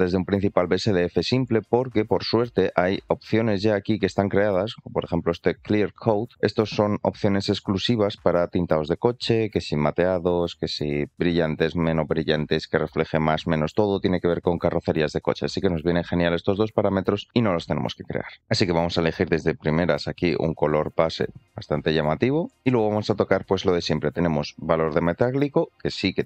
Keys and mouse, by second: 1.7 shift+middle click, 3.1-4.0 shift+middle drag, 5.2-18.4 drag, 18.7 shift+middle click, 19.6 drag, 24.2 click.